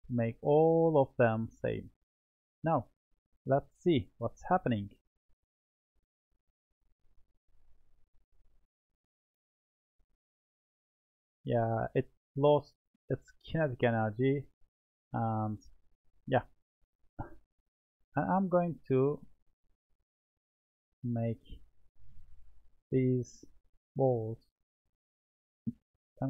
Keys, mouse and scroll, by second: 0.7-1.4 middle drag, 1.4-1.9 scroll up 3, 1.9-3.7 middle drag, 3.7-4.1 scroll up 1, 4.1-5.7 middle drag, 5.7-8.4 drag, 8.4-13.4 middle drag, 18.1-19.1 drag, 19.1-20.5 middle drag, 20.5-21.6 scroll up 5, 21.6-23.4 middle drag, 23.4 click, 23.7-24.2 scroll down 2, 24.2-24.9 middle drag, 24.9-25.8 scroll down 2, 25.8-26.2 middle drag.